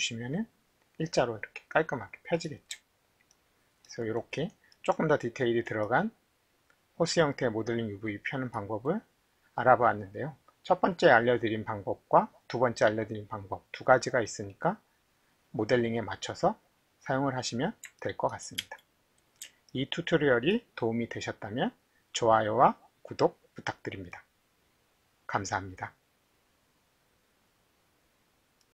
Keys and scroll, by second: 18.6 alt+`.